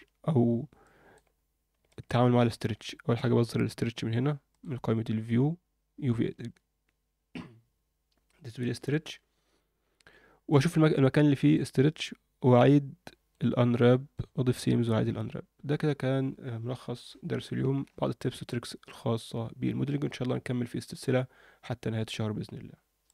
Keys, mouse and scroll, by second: 0.3-0.8 scroll down 2, 0.8 alt+middle click, 1.3 scroll up 1, 1.8 alt+shift+middle click, 3.1-3.9 scroll down 4, 4.5-9.6 drag, 10.5 click, 11.1 alt+middle click, 11.8-12.3 scroll up 1, 12.5-13.5 alt+middle drag, 13.8 alt+middle click, 15.0-16.1 scroll down 1, 16.1-17.0 scroll down 1.